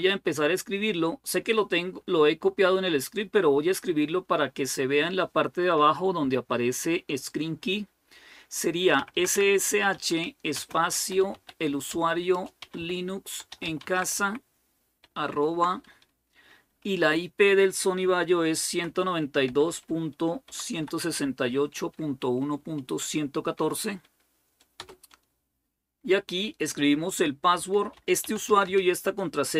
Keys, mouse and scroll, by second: 8.7-15.1 typing, 17.9-23.3 typing, 24.6 Return, 27.1-29.5 typing.